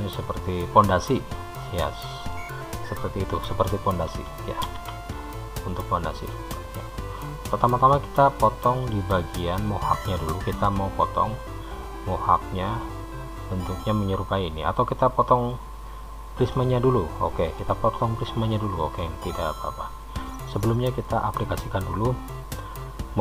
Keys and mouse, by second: 0.2-2.5 middle drag, 5.0 alt+h, 7.0 drag, 7.7 click, 10.4-12.0 middle drag, 15.6 click, 16.7-17.9 middle drag.